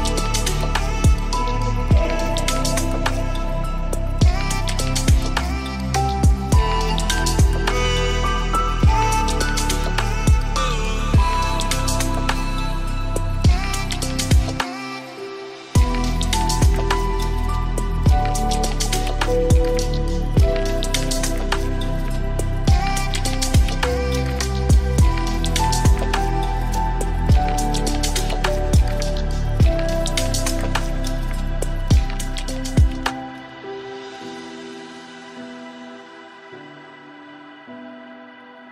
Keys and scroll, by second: 25.7 ctrl+Return, 27.4 ctrl+space, 33.8 ctrl+d, 34.0 ctrl+space.